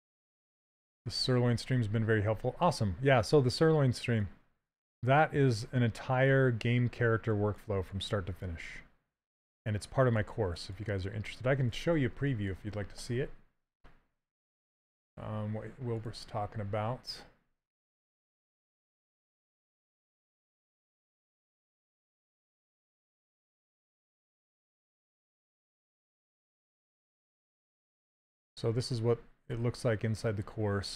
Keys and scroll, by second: 2.7 s, 7.5 s, 19.1-20.0 typing.